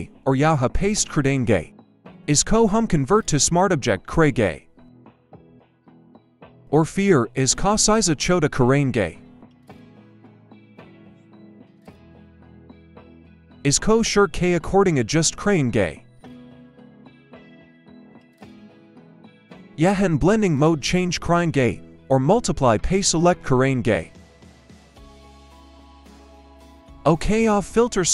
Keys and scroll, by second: 1.0 ctrl+v, 7.0 ctrl+t, 9.0 ctrl+a, 9.4-9.7 typing, 10.4 Return, 12.0 Return, 15.4 ctrl+=, 15.8 ctrl+=, 22.4 Return, 23.2 ctrl+-.